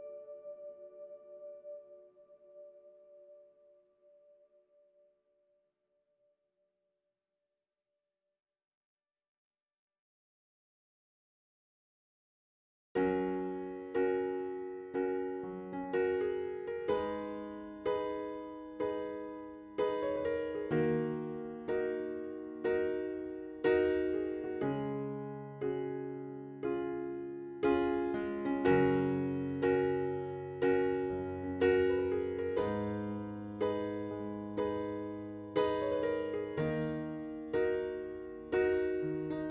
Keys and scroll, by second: 22.8-23.8 typing, 24.3 Return, 26.9 2, 27.1 Return, 32.8-34.2 typing.